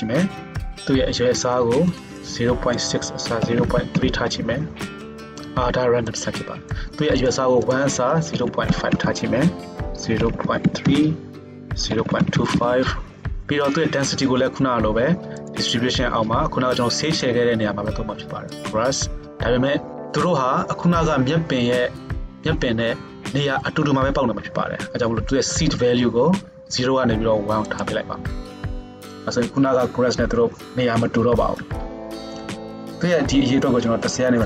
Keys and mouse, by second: 7.4-9.0 middle drag, 9.0-15.6 drag, 15.6-17.1 middle drag, 17.1-34.4 drag.